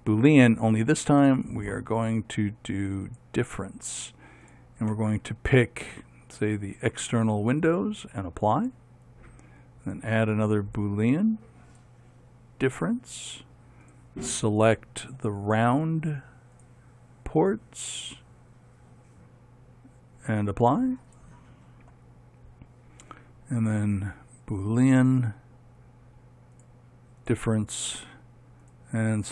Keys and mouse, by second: 0.1 click, 1.7-7.7 drag, 8.8-17.3 drag, 21.2-25.1 drag, 25.4-29.3 drag.